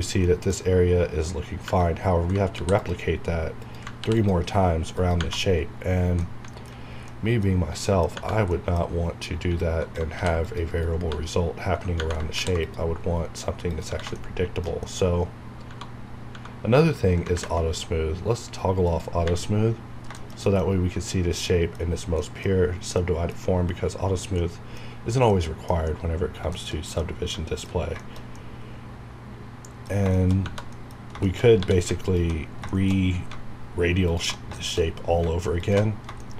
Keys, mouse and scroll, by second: 0.2 scroll up 1, 0.2 middle click, 1.1-1.4 scroll up 1, 1.6 Tab, 1.9 scroll up 1, 2.5 ctrl+r, 2.7 ctrl+click, 4.0 ctrl+r, 4.1 click, 5.3 Tab, 5.4 scroll down 1, 6.2 middle click, 7.1 middle click, 7.5 scroll down 1, 7.8 middle click, 8.1-8.5 scroll up 1, 8.5 middle click, 8.8-9.4 scroll up 1, 10.1 ctrl+r, 10.4 click, 10.7 right click, 11.1 scroll down 1, 12.3 ctrl+r, 12.6 ctrl+click, 14.1 shift+middle click, 15.0 scroll up 1, 15.7 Tab, 17.3 ctrl+`, 18.8 click, 19.5 scroll down 1, 20.1 shift+middle click, 20.7-21.5 scroll up 1, 21.5 middle click, 24.1 scroll down 1, 24.4-25.8 middle drag, 25.8-26.2 scroll up 1, 26.4-26.8 scroll down 2, 26.7 shift+middle click, 27.0 middle click, 28.3 scroll up 1, 30.3 shift+scroll up 1, 30.4 Tab, 30.7 middle click, 31.0-31.6 scroll up 3, 31.2 shift+middle click, 31.6 3, 32.0 click, 32.4 scroll down 1, 32.7 shift+middle click, 33.0 scroll up 1, 34.1 alt+shift+click, 34.5 middle click, 34.9 scroll up 1, 35.6 alt+shift+click, 35.9 shift+scroll down 1, 36.2 shift+middle click.